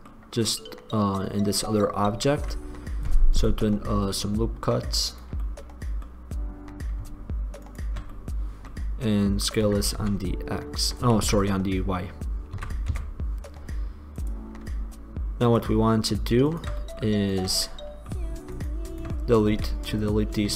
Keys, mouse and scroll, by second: 2.5 ctrl+r, 7.5 middle click, 9.9 s, 10.9 click, 11.1 click, 11.3 click, 11.3 ctrl+z, 12.7 s, 14.4-16.3 drag, 16.9 middle click, 17.5-19.8 drag, 19.8 x.